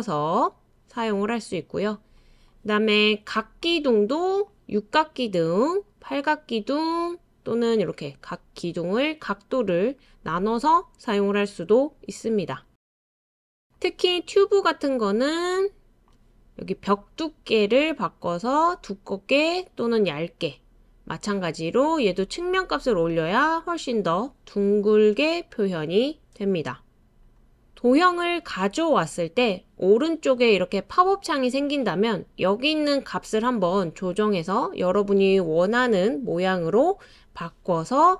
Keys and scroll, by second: 36.2 BackSpace, 37.0 BackSpace.